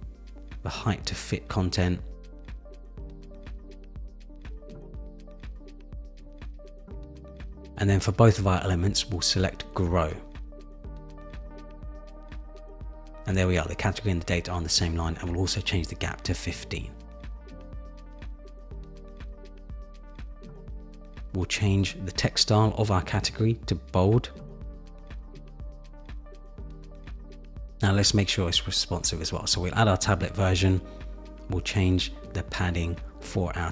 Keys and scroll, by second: 17.0 Up, 17.8 Up, 18.7 Up, 33.4 super+-.